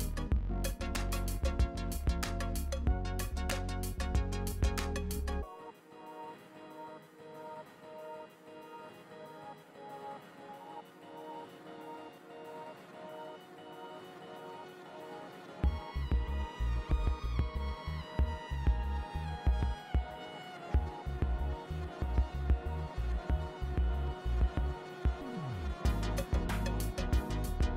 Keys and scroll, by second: 21.0 super+z.